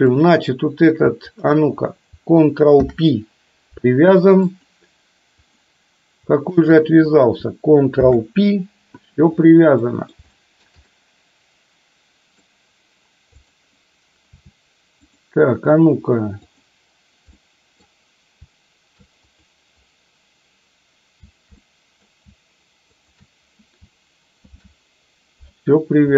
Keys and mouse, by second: 0.2 click, 1.4 shift+click, 2.9 ctrl+p, 5.4 click, 8.2 ctrl+p, 9.9 middle click, 10.4 shift+middle click, 10.9-12.5 middle drag, 13.4 click, 15.2 click, 16.5 click, 17.5 middle click, 19.3 click, 21.7 middle click, 24.5 ctrl+p.